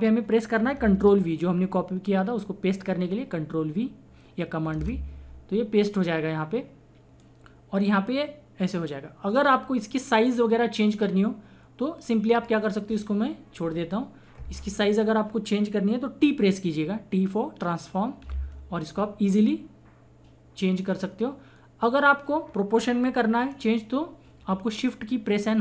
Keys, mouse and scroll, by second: 0.7 click, 4.7 ctrl+v, 7.5-13.8 drag, 18.4 t, 19.5-25.6 drag.